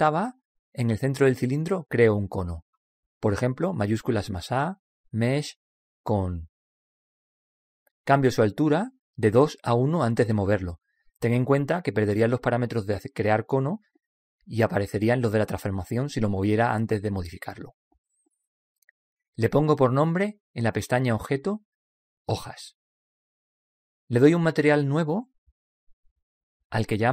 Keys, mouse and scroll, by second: 4.3 shift+a, 10.1-13.3 drag, 20.9 click, 25.0-27.1 drag.